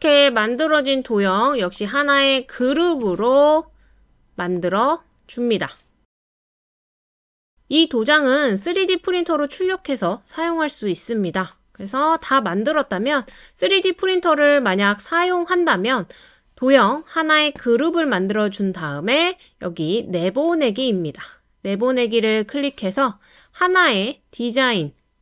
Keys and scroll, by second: 13.1 typing.